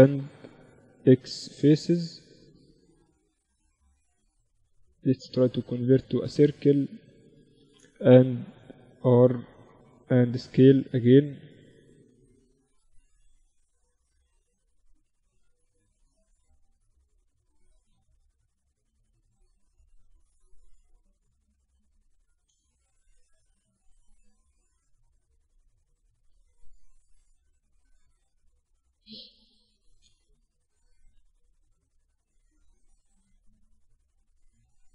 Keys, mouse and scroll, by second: 0.4 x, 2.3-4.7 right drag, 2.9-4.3 drag, 3.7 w, 7.4 r, 9.5 s, 12.1 r, 14.4 s, 17.5 z, 18.1-20.0 drag, 19.8 right click, 20.4-22.3 drag, 20.4-21.5 right drag, 21.5 ctrl+z, 21.7 a, 22.4 b, 23.7-25.5 drag, 25.7 z, 26.1 z, 26.6 a, 26.9-29.1 right drag, 27.3 w, 30.3 ctrl+z, 30.8 Tab, 31.2 Tab, 31.7 a, 32.3-34.1 drag, 33.1 s, 34.5-34.9 drag, 34.5 z.